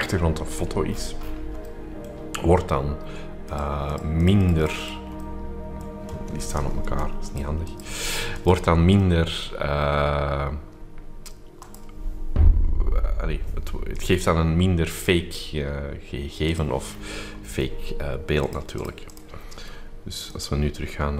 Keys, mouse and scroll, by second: 0.0 middle click, 0.0-0.5 scroll up 2, 0.5-1.8 scroll down 3, 1.8-2.8 scroll up 2, 3.5-5.4 drag, 5.4 middle click, 5.4-6.3 scroll up 2, 6.4 click, 6.9 Delete, 7.4-9.1 drag, 9.1-10.0 scroll up 2, 9.6 middle click, 11.5 click, 13.9 click, 14.9 click, 16.5 click, 16.8-17.6 scroll down 2, 17.6 shift+middle click, 17.6-18.3 shift+scroll up 3, 18.4-19.5 drag, 20.3 click.